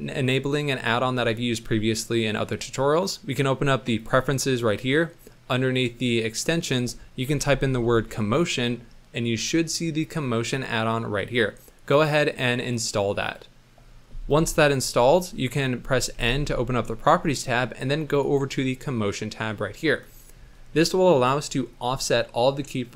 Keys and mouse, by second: 1.2-4.2 drag, 15.2 middle click, 16.1 n, 18.3 click, 19.8 middle click, 20.2 shift+middle click, 20.5 middle click.